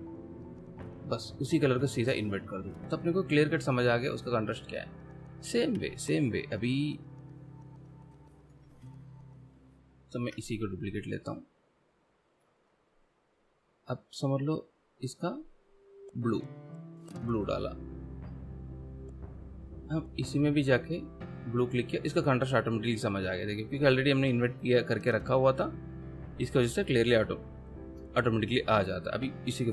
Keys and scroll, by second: 10.4 shift+v.